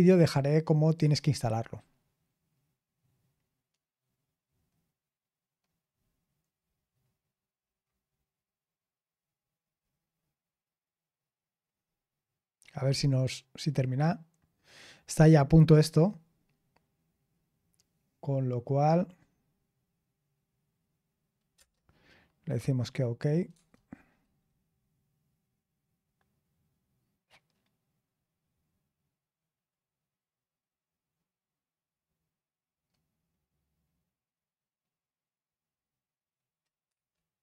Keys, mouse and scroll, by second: 7.5-8.0 scroll down 1, 21.5 Return, 23.5 Tab, 36.8 Return.